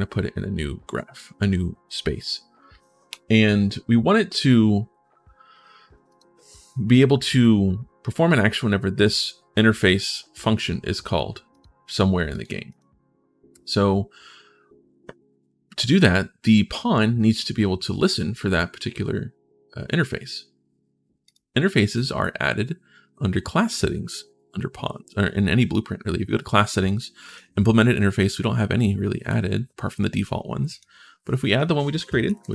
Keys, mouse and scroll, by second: 5.8 click, 8.8 click, 11.3 click, 12.1 click, 12.5 click, 21.0 click, 27.0 click, 30.5 click, 32.2-32.5 typing.